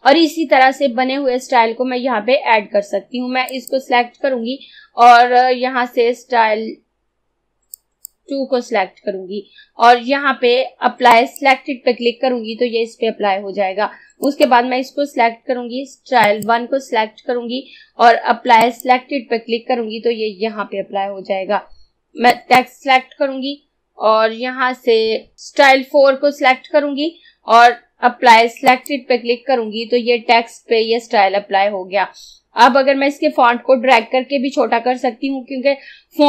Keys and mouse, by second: 3.5 click, 7.8 click, 11.2 click, 14.3 click, 18.6 click, 22.3 click, 25.4 click, 28.7 click.